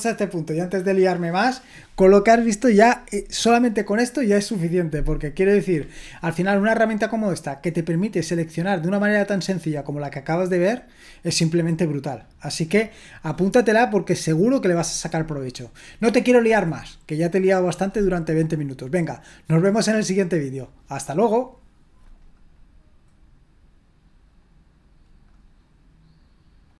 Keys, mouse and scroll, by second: 22.2-26.3 drag, 26.7 click.